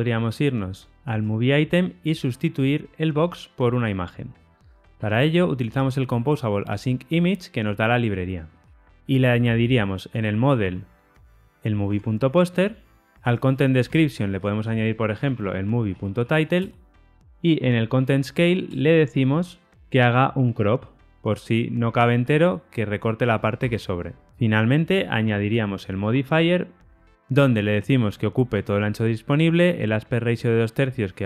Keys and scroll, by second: 11.8 Tab, 13.7 Tab, 14.5 alt+shift+Left, 18.6 Return, 23.8 Return, 25.9 Return.